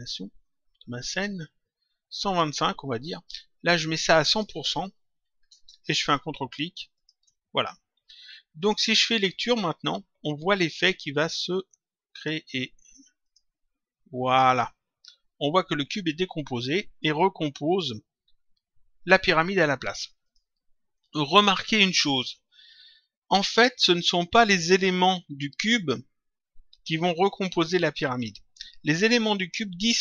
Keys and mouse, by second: 4.1 click, 6.9 ctrl+click, 8.5 click, 11.4 click, 13.1 click, 20.2 click.